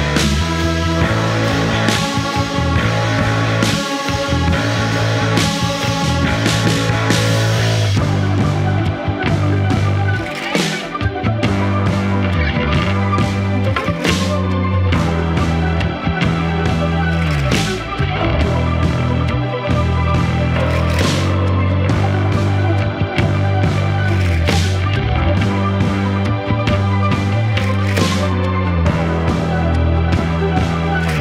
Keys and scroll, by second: 1.8 F1, 8.3 ctrl+d, 8.4 Escape, 10.3 F1, 15.2 ctrl+d, 15.3 Escape, 17.5 F1, 20.0 F1.